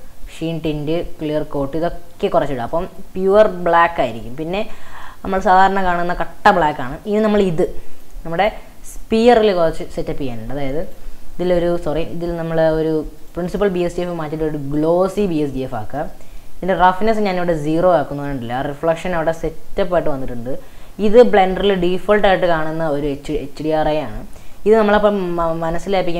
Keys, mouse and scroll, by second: 0.3-2.1 drag, 2.1-2.5 scroll down 9, 2.8-4.4 middle drag, 4.4-5.1 scroll up 7, 5.1-6.4 middle drag, 6.4-6.7 scroll up 3, 6.8-7.5 middle drag, 7.6 scroll up 2, 8.0 click, 8.4 drag, 9.7-10.9 drag, 11.8-13.3 drag, 13.5-15.6 drag, 15.6-16.3 middle drag, 16.3-17.1 scroll up 2, 17.1-17.8 drag, 17.8-19.1 middle drag, 19.1-21.1 scroll up 4, 21.5-22.5 scroll down 3, 22.5-23.6 middle drag, 23.6-24.3 scroll down 3, 24.3-24.8 scroll up 8, 24.9-25.6 middle drag, 25.6 scroll down 2.